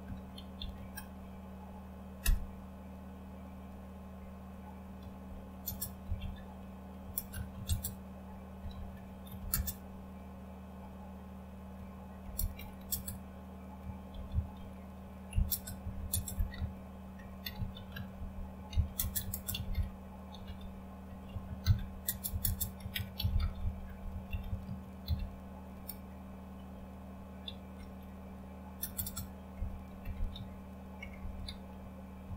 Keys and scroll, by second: 0.0-2.2 typing, 5.0-9.9 typing, 11.5-26.2 typing, 27.4 typing, 28.8-32.3 typing.